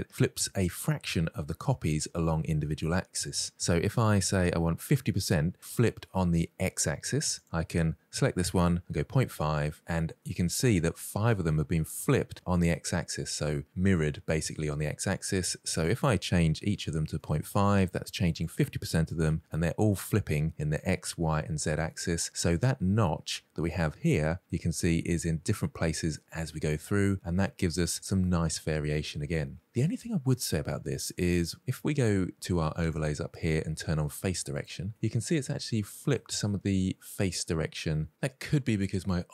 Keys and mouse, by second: 7.1-9.4 drag, 10.2-10.6 middle drag, 15.6-17.0 drag, 18.1-19.4 drag, 21.7-22.9 middle drag, 24.0-24.5 middle drag, 26.0-27.6 middle drag, 28.2-29.6 middle drag, 32.7-34.9 drag, 35.5-36.0 middle drag.